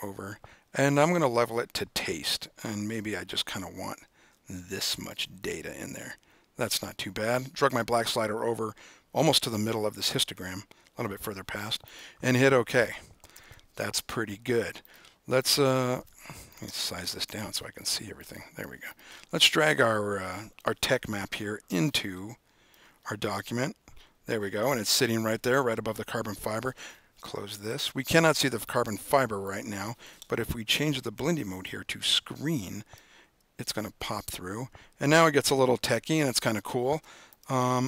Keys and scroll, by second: 13.4 super+-, 17.3 super+-.